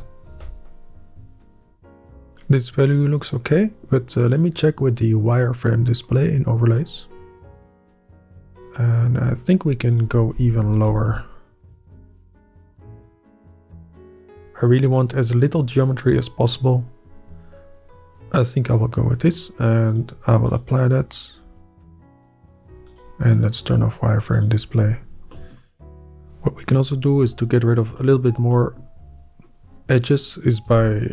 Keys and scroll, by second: 0.4 Up, 10.6 Up, 10.9 0, 10.9 ., 11.1 Up, 11.6 Up, 11.8 Return, 12.4 Up, 28.0 shift+Up, 28.7 Up, 30.7 Up.